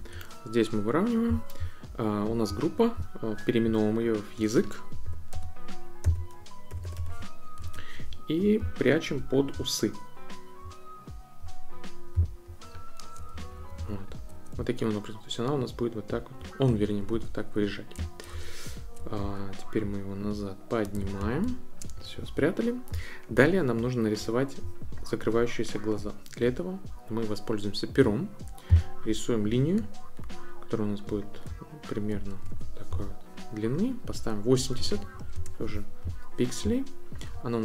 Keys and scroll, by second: 5.0-7.5 typing, 7.6 Return, 13.3 shift+Up, 14.5 shift+Down, 16.7 shift+Up, 18.3 shift+Down, 19.2 shift+Up, 32.4 Return, 34.5-35.5 typing.